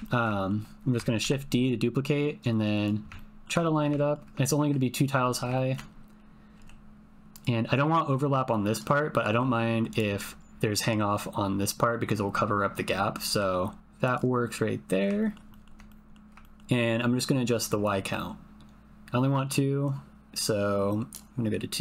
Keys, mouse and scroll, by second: 0.0 ctrl+click, 0.3 shift+click, 1.2 shift+d, 2.8 click, 3.2 ctrl+click, 3.7 shift+click, 4.0 ctrl+click, 5.6 ctrl+click, 6.5 g, 9.2 g, 9.9 click, 13.2 g, 14.1 click, 14.6 middle click, 15.2 ctrl+middle click, 15.5 ctrl+middle click, 15.8 click, 15.9 middle click, 16.0 click, 16.1 middle click, 16.4 shift+middle click, 18.5-21.2 drag.